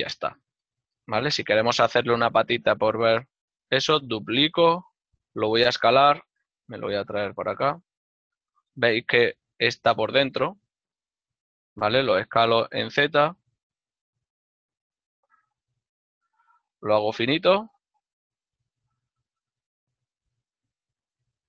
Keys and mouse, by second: 0.3 right click, 0.9 l, 3.6 shift+d, 4.3 right click, 5.2 s, 6.1 KP_Decimal, 8.0 ctrl+middle click, 8.5 middle click, 10.9 z, 11.6 middle click, 12.5-13.3 typing, 13.3 click, 15.8 click, 15.9 s, 18.3 z, 18.9 click, 20.8 z, 21.3 click.